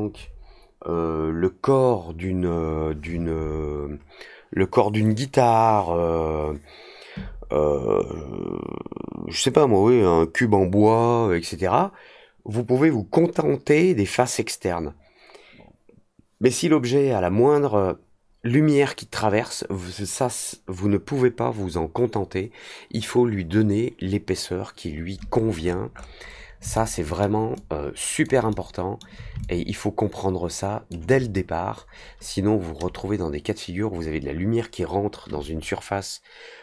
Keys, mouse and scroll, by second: 25.5-26.4 scroll up 6, 26.7-27.1 alt+middle drag, 27.5-28.2 alt+drag, 28.4-28.9 alt+middle drag, 29.4-30.8 alt+drag.